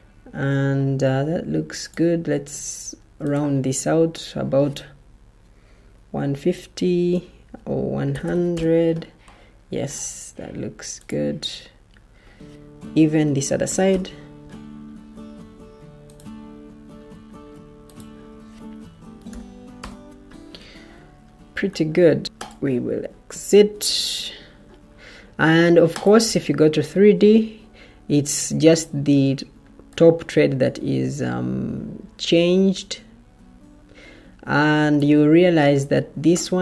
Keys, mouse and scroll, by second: 0.4-2.0 typing, 6.0 1, 8.0-8.4 typing, 8.4 Return, 12.7-13.6 typing, 13.8 Return, 18.4-19.2 typing, 19.7 Return, 21.3 Escape, 23.8 Escape, 35.8 Escape.